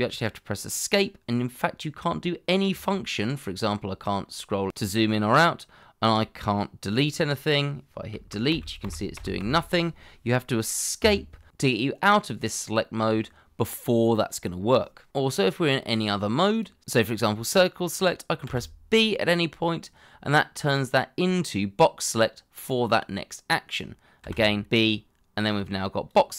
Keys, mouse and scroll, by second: 2.8-3.1 scroll down 1, 3.1-3.6 scroll up 1, 3.6 scroll down 1, 4.2-4.6 scroll up 1, 4.6-5.0 scroll down 1, 8.1 Delete, 11.0 Escape, 20.8 b, 24.2 b.